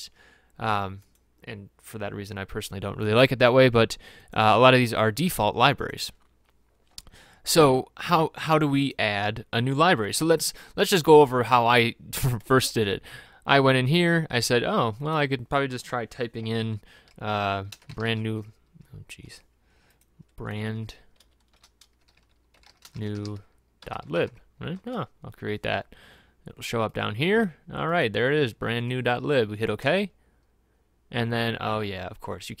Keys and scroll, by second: 17.9-18.2 typing, 20.9-24.2 typing, 21.2 F11, 24.9 Return, 26.2-27.0 typing.